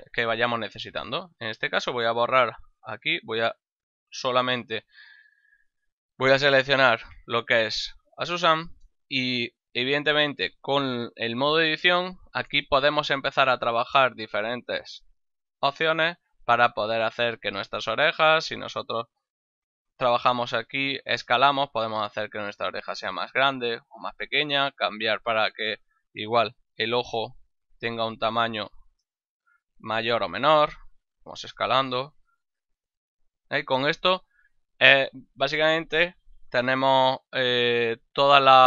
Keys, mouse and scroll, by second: 0.0 Tab, 1.0 shift+right click, 1.3 x, 1.6 click, 2.1 shift+middle click, 2.8 right click, 4.1 1, 4.7 ctrl+middle click, 5.7 ctrl+middle click, 6.4 shift+middle click, 7.0 ctrl+middle click, 7.4 Tab, 8.4 ctrl+middle click, 8.8 shift+middle click, 12.3 right click, 14.0 shift+right click, 14.9 c, 15.2 click, 19.4 right click, 20.6 s, 23.9 right click, 25.4 right click, 26.3 l, 28.2 alt+shift+right click, 31.4 s, 33.7 right click, 38.1 ctrl+middle click.